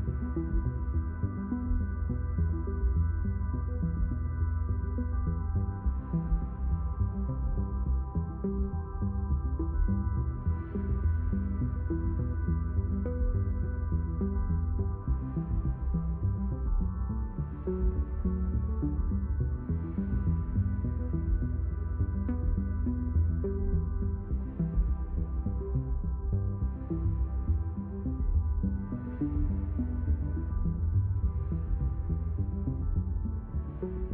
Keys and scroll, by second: 19.5 ctrl+alt+d, 29.5-33.0 typing.